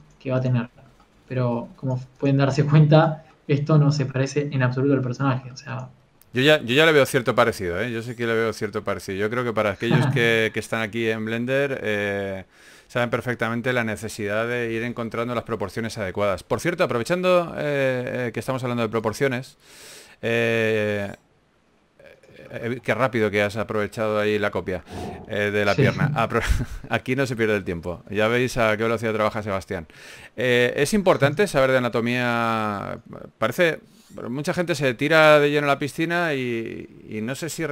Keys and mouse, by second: 0.6-2.8 right drag, 1.8-3.4 drag, 2.6 a, 3.6 a, 6.3-8.1 right drag, 7.3 KP_1, 8.3 click, 8.9-10.5 middle drag, 13.6-15.4 drag, 15.6 a, 15.8 middle click, 17.2 KP_1, 19.1 shift+d, 19.9 r, 20.5 g, 21.5 click, 21.7-23.2 middle drag, 21.9 r, 23.5 g, 25.8 shift+d, 26.6 s, 27.0 g, 27.8 KP_3, 28.6 right click, 28.8 click, 29.4 r, 29.8 g, 30.3 click, 31.5-35.1 typing, 36.8 KP_3.